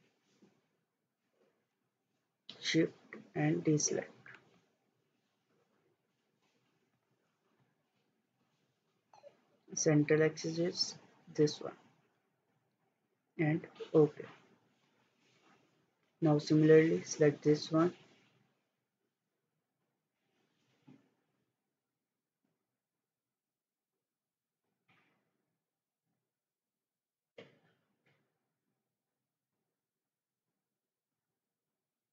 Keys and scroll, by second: 19.0 Escape, 24.5 Escape.